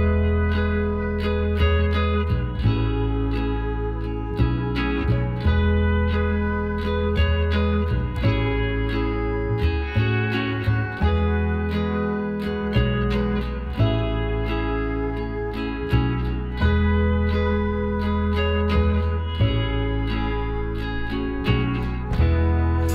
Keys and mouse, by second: 0.6 KP_9, 1.3-3.7 drag, 2.6 e, 8.2 Tab, 8.8 a, 13.6 click, 15.6 click, 16.5-17.5 right drag, 16.8 Tab, 17.5 KP_1, 18.1 z, 21.5-22.9 drag, 22.8-22.9 right drag.